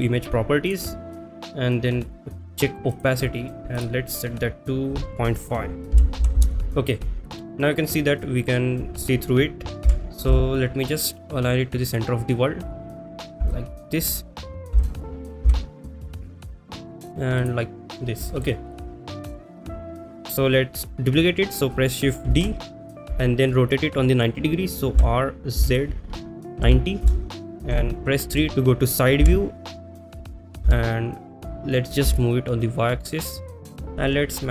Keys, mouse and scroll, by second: 0.7 click, 3.0 click, 3.8-6.4 drag, 10.6 g, 10.6 z, 13.6 shift+middle drag, 17.7 x, 18.3 shift+middle drag, 18.7 click, 19.7 middle click, 28.4 Return, 28.4 KP_3, 33.9 y.